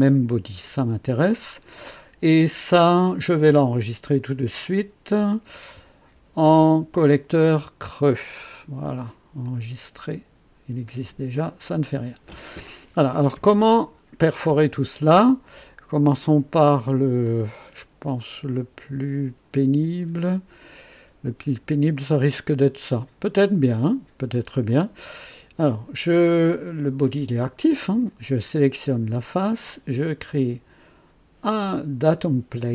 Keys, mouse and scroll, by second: 0.6-1.8 drag, 2.5-3.3 right drag, 5.9 ctrl+s, 8.0 click, 9.4 click, 10.8 click, 11.6-12.9 drag, 13.2 scroll up 1, 13.7 click, 15.5-16.9 drag, 17.2-21.6 drag, 24.6 click, 28.8 click.